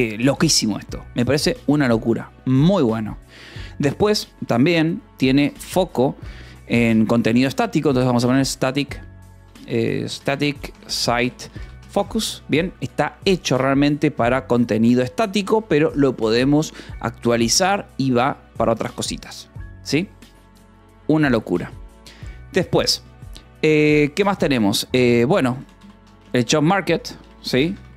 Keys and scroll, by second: 0.2 :, 0.3 space, 4.4 space, 5.6 o, 5.8 space, 6.1 BackSpace, 7.8-12.3 typing, 14.8 o, 15.3 :, 15.5 space, 25.4-27.9 typing.